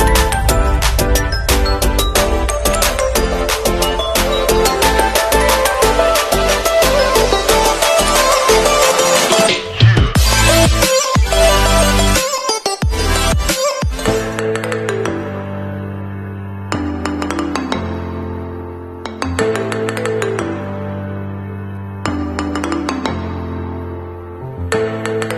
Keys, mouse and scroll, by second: 0.5 scroll up 1, 1.1 alt+scroll down 1, 3.2 alt+click, 4.0 click, 16.1 scroll down 1, 22.0 click.